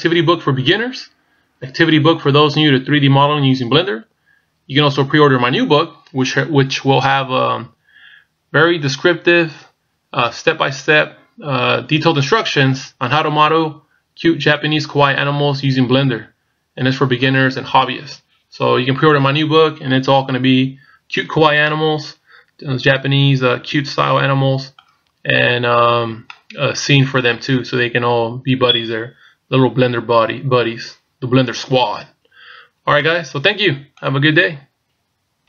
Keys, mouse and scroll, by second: 21.7 middle click, 26.3 middle click, 32.7 scroll down 2, 33.0 middle click.